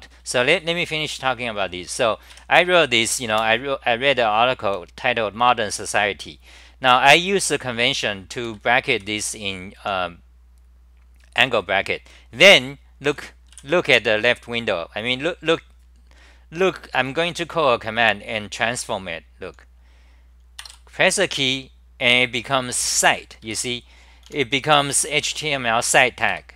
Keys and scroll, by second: 0.0-1.8 typing, 3.0 ctrl+g, 3.3 super+r, 8.5 ctrl+g, 9.1 g, 9.8 h, 13.6 w, 23.2-24.3 typing, 26.4 ctrl+g.